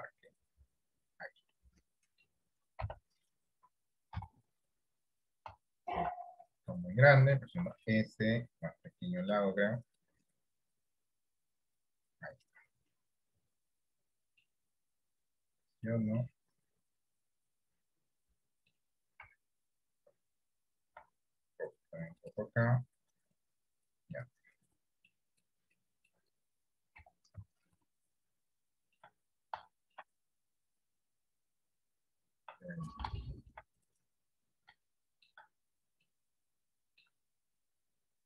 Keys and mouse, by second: 1.1 click, 1.6 middle click, 3.0 KP_1, 4.3 KP_3, 5.8 shift+middle click, 7.7 s, 10.1-11.2 drag, 11.6 click, 12.5-14.5 middle drag, 15.3 click, 16.4-18.8 middle drag, 19.3 KP_1, 21.0 r, 22.9-24.0 drag, 24.2 middle click, 25.4 right click, 25.9 middle click, 27.1 KP_1, 27.5 KP_3, 28.6 shift+middle click, 29.8 shift+middle click, 31.0 click, 33.4 shift+middle click, 35.0 shift+middle click, 36.1 shift+middle click.